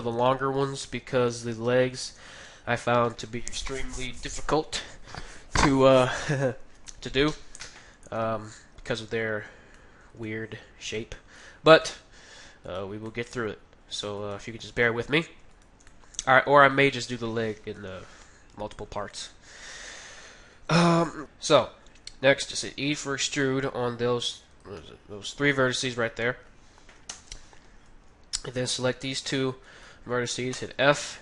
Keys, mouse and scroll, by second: 7.1 KP_1, 8.2-14.8 middle drag, 12.6-18.5 right drag, 15.8-17.4 middle drag, 17.7 KP_1, 19.1-21.2 middle drag, 22.6 e, 24.6 e, 24.8-30.3 middle drag, 27.1 KP_1, 28.8-31.2 right drag, 30.6 f, 31.0-31.2 middle drag.